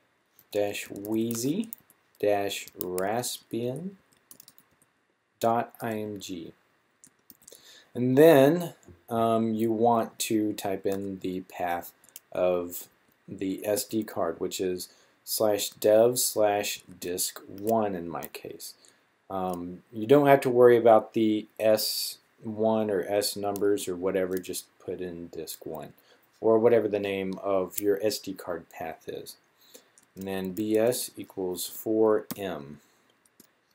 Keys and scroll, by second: 0.2-5.7 typing, 7.1-8.2 typing, 9.6-10.7 typing, 11.8 typing, 12.8-13.5 typing, 15.5 typing, 16.5-17.3 typing, 30.4-32.0 typing.